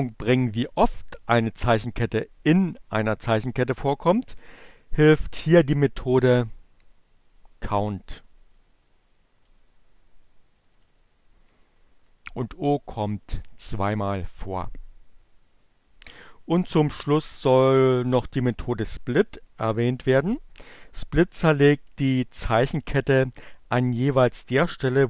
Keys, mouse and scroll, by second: 7.9-9.3 drag, 10.6 click, 12.4-13.8 drag.